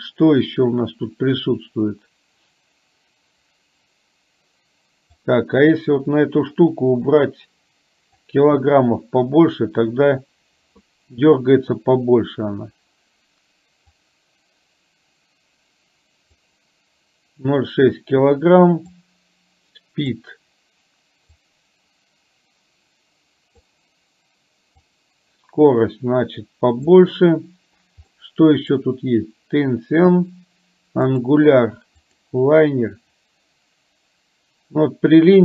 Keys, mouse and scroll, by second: 5.3 click, 7.2-8.3 drag, 14.0-16.4 drag, 19.0-20.2 drag, 21.4-23.7 drag, 25.0-26.9 drag, 28.2 middle click, 31.2-32.3 drag.